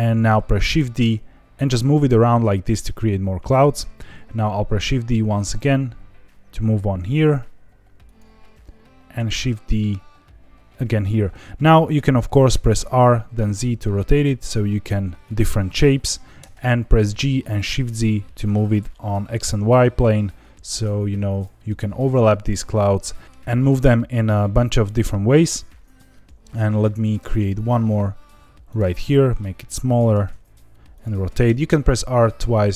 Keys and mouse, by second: 0.8 shift+d, 1.5 g, 3.4 click, 4.8 shift+d, 8.0 click, 9.2 shift+d, 10.9 click, 12.5 r, 12.8 z, 15.2 click, 16.4 g, 17.6 shift+z, 21.3 click, 22.0 click, 22.2 l, 23.2 middle click, 27.2 shift+d, 28.6 click, 28.9 s, 29.8 click, 30.1 r, 30.3 z, 30.9 click, 31.2 r, 31.5 r.